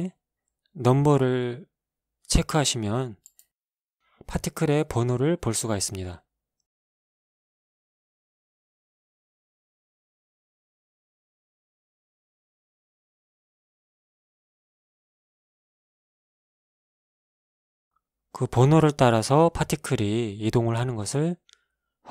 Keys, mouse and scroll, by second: 0.5 click, 1.0 scroll down 2, 3.3 click, 4.9 alt+a, 8.4 alt+a, 8.5 alt+right click, 10.2 click, 12.3 scroll up 1, 13.2-15.3 right drag, 16.4 shift+middle click, 17.3 shift+scroll up 2, 20.5 alt+a.